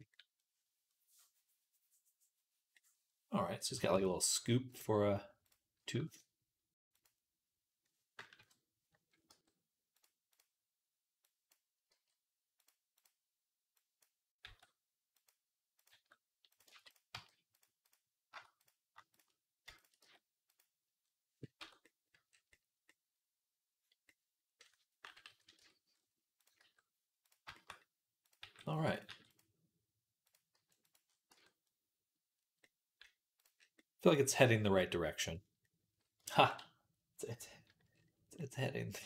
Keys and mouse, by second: 3.8 Tab, 4.6-6.6 middle drag, 6.6-8.9 drag, 8.2 KP_3, 9.1 g, 11.8 g, 15.7 g, 16.6 ctrl+z, 17.0 g, 19.9 g, 21.4 Tab, 21.6 middle click, 22.1 middle click, 22.8-25.1 middle drag, 25.1 KP_3, 25.4 Tab, 26.4 g, 28.2 g, 28.9-34.3 middle drag, 28.9 g, 30.4 g, 31.2 Tab, 34.6 middle click, 34.9-36.0 middle drag, 36.3 ctrl+s, 37.7-39.0 middle drag.